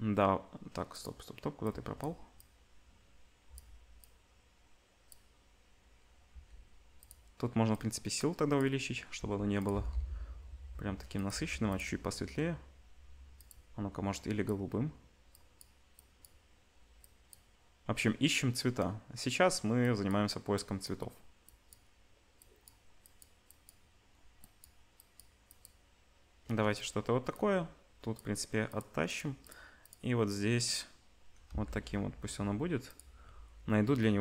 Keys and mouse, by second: 0.9 click, 6.3 g, 7.7-9.7 drag, 9.1 g, 9.7-13.4 middle drag, 9.7 g, 11.3 g, 13.4 click, 13.5-27.4 middle drag, 27.4-29.2 drag, 31.5 g.